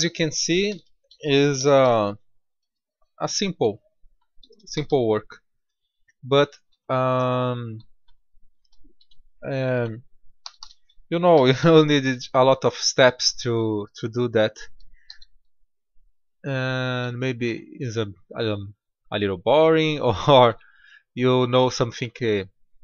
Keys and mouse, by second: 0.6 a, 0.7 a, 1.5 shift+d, 4.7 g, 10.3 a, 10.5 a, 11.2 shift+d, 14.9 g, 17.4 Tab.